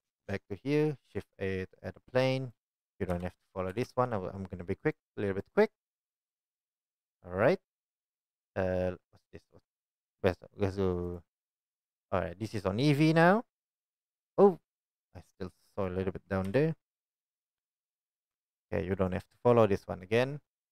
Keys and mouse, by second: 1.1 shift+a, 2.1 s, 3.1 KP_1, 3.7 g, 5.4 click, 15.8 click, 16.5 KP_1, 18.2 g, 19.3 drag, 20.6 click.